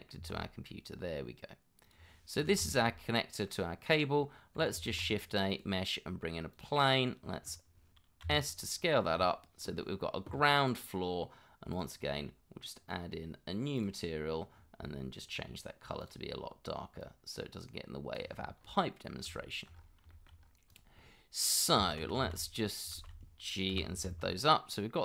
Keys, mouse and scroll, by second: 0.2 g, 2.7 shift+middle click, 3.5 middle click, 4.1 scroll down 1, 4.5 middle click, 4.9 shift+a, 8.2 s, 14.5-14.9 scroll down 1, 18.5-19.0 scroll up 2, 18.9 middle click, 19.4 shift+middle click, 19.7 scroll up 1, 20.1 shift+middle click, 20.4 scroll up 1, 21.0 middle click, 21.8 Tab, 22.2 shift+z, 23.7 g, 24.1 z.